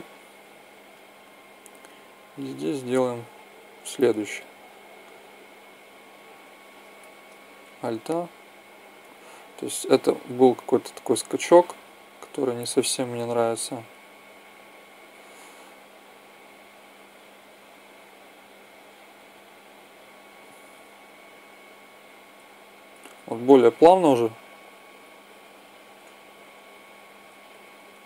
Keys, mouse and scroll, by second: 4.2 click, 9.1 Escape, 14.9 Escape, 20.4 alt+a, 22.7 Escape, 23.2 alt+a, 25.2 Escape, 27.2 Escape.